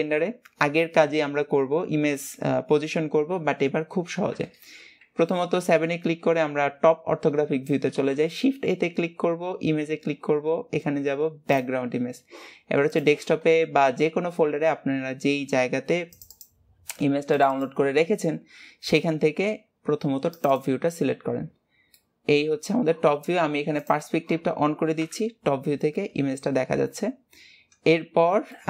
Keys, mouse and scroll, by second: 21.5-22.1 scroll down 2, 22.1-23.9 middle drag, 23.9-26.3 drag, 26.3 scroll up 2, 26.8 scroll down 2.